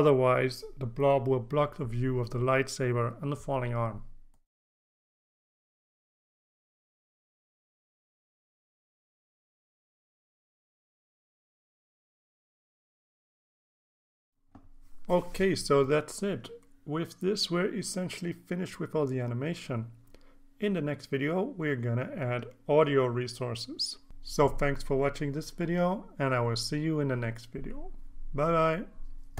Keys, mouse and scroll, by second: 0.7-3.4 drag, 3.8 click, 4.7 click, 5.0 click, 5.5 click, 6.3 click, 7.7-11.2 drag, 11.4 click, 11.8-12.4 drag, 12.5 click, 13.0 ctrl+s, 13.9 ctrl+scroll down 2.